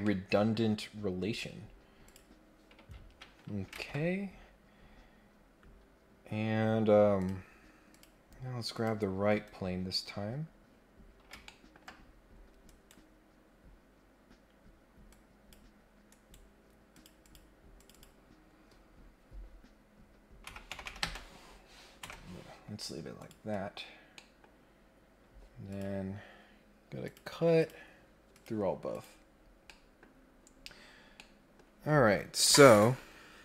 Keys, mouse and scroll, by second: 0.0 middle click, 1.1 scroll up 2, 1.3-1.8 scroll down 4, 2.0 click, 3.1 scroll down 1, 4.3-4.7 scroll down 3, 4.7-5.6 scroll up 3, 7.1 click, 7.8 click, 8.7 click, 9.9-10.4 scroll up 2, 10.6-11.2 scroll down 3, 11.4 ctrl+middle click, 11.9-12.4 scroll up 2, 12.6 right click, 15.1 click, 16.1 right click, 16.9 click, 17.2 click, 17.7 click, 17.9 click, 23.1 click, 24.1 middle click, 25.7 click, 27.0 click, 27.5 click, 28.3 click, 28.9 click, 29.3-29.7 scroll down 2, 29.7 middle click, 29.9 scroll up 1, 30.1-30.5 scroll down 3, 30.8 scroll up 2, 31.1 middle click.